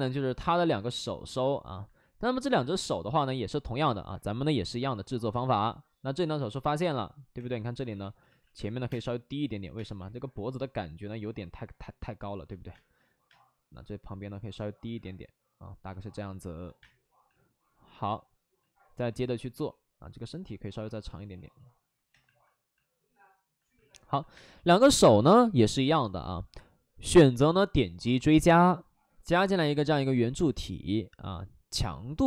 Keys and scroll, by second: 0.1 space, 6.5 w, 7.8-9.7 typing, 8.2 ctrl+z, 12.7 space, 13.2 space, 16.7 space, 19.5 w, 22.0 2, 24.3 space.